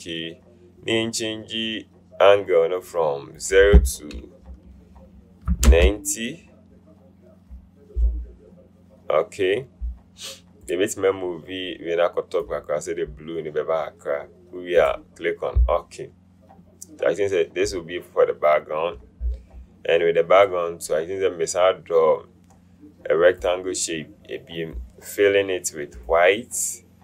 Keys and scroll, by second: 5.9 KP_9, 5.9 KP_0.